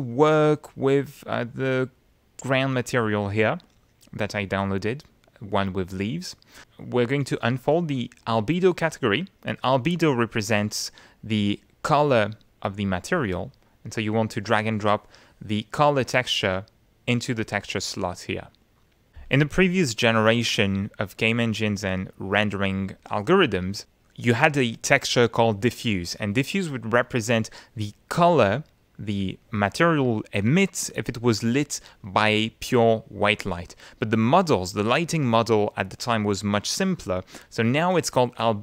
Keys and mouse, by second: 2.5 click, 4.2 click, 6.1 click, 14.4-17.6 drag, 18.8 click, 23.7 click.